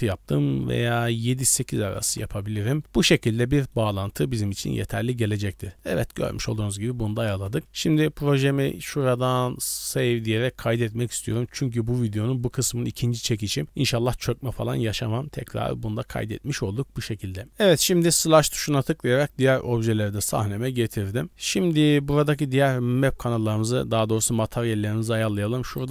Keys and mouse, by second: 0.9-2.1 drag, 3.4 middle drag, 4.4 middle drag, 5.2-5.5 middle drag, 5.8 middle click, 6.5-6.8 middle drag, 7.3 KP_0, 8.7-11.0 drag, 19.5 middle drag, 20.7 shift+middle drag, 21.1 middle click, 21.7 shift+middle click, 22.1 middle drag, 23.1 click, 23.5 middle click, 25.3 g.